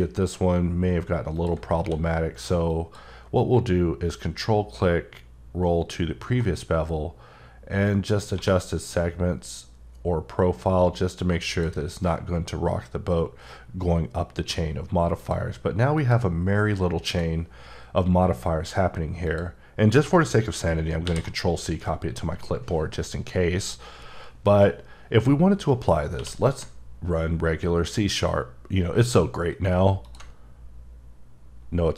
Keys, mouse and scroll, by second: 1.3 click, 1.7 q, 2.6 click, 4.1-4.4 ctrl+scroll up 1, 4.7-5.7 ctrl+scroll up 1, 6.5-7.6 scroll up 2, 7.8-8.3 scroll up 1, 8.3 1, 11.5 click, 15.1 click, 21.0 ctrl+c, 26.2 q, 30.0 ctrl+click.